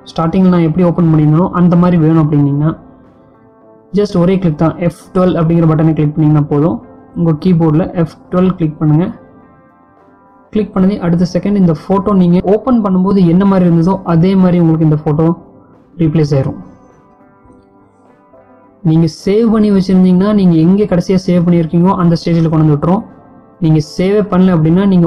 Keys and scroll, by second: 4.9 F12.